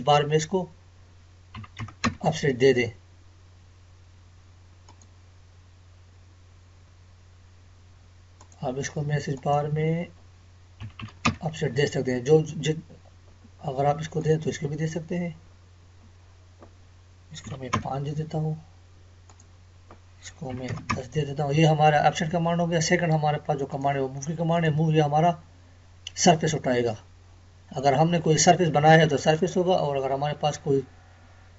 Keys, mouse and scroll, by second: 4.9 click, 8.4 click, 8.5 click, 13.4 click, 13.5 scroll up 1, 15.3 scroll up 1, 19.3 click, 21.8 scroll down 1, 22.3 Escape, 23.7 click, 30.0 Escape.